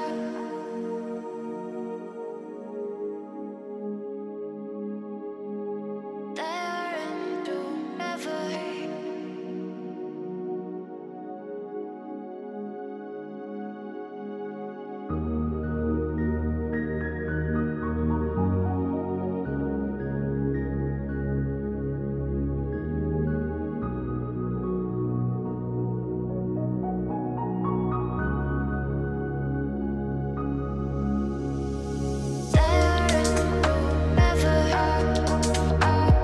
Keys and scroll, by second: 5.4 ctrl+space, 24.2 ctrl+g, 25.1 ctrl+space, 32.7 ctrl+space.